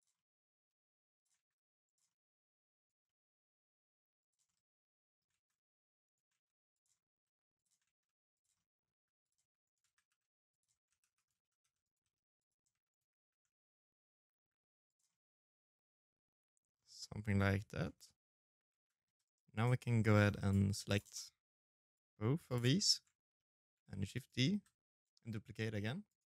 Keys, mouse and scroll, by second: 0.1 ctrl+a, 0.8 middle click, 1.5 right click, 1.8 middle click, 2.2 e, 3.2 middle click, 4.1 ctrl+a, 5.2 ctrl+a, 5.8 e, 6.6 ctrl+a, 7.3 middle click, 7.7 g, 8.4 shift+right click, 8.6 g, 9.6-12.1 typing, 10.2 right click, 11.6 right click, 12.4 middle click, 13.1 g, 13.8 middle click, 15.4-15.9 scroll down 5, 15.8 middle click, 16.3 shift+middle click, 16.7 scroll down 1, 16.8 middle click, 17.5 shift+z, 17.8 c, 18.3 right click, 18.6 c, 19.9 middle click, 20.4 c, 21.6 shift+z, 22.1 middle click, 22.7 shift+d, 23.3 r, 25.9 middle click.